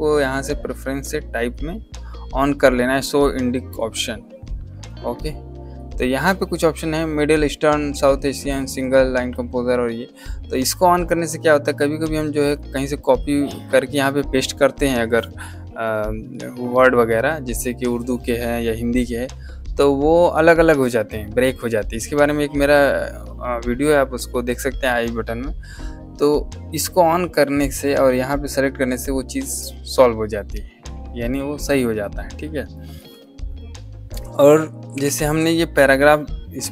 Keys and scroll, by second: 34.8 shift+t.